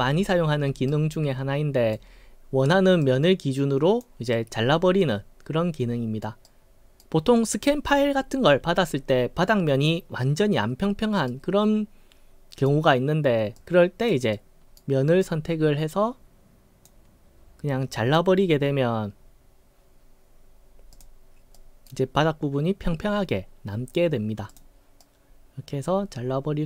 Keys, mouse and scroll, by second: 0.9-1.9 right drag, 3.0-4.0 drag, 4.3-6.2 right drag, 6.5-7.0 right drag, 11.3-12.6 right drag, 13.6 click, 14.3-14.8 right drag, 15.2-16.9 drag, 20.9 click, 21.5 right click, 24.5 click, 25.0-26.6 right drag.